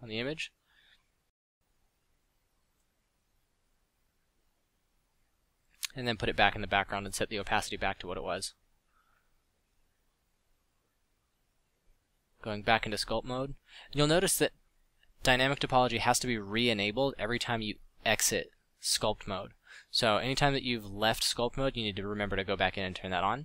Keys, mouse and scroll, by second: 0.0-0.9 typing, 3.1 alt+r, 3.2 alt+g, 4.6 click, 6.0 a, 7.4 KP_5, 8.8-10.0 drag, 10.7-12.3 drag, 14.2 alt+z, 16.5 Tab, 16.8 a, 17.1 a, 19.3 Tab.